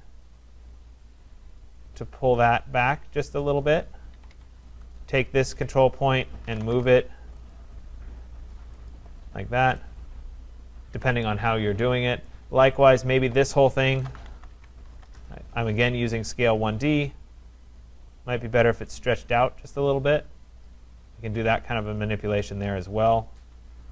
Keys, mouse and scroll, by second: 0.3 click, 1.6 click, 3.6 click, 4.2 Escape, 4.3 Escape, 5.0 click, 5.8 click, 6.2-7.2 typing, 7.5 click, 8.9 click, 9.3-9.7 scroll, 10.9 Return, 11.2 right click, 12.1-12.5 scroll, 12.8 click, 13.5-15.4 typing, 16.9 click, 17.8 click, 20.7 click, 22.0 click, 23.3 shift+click, 23.8-23.9 typing.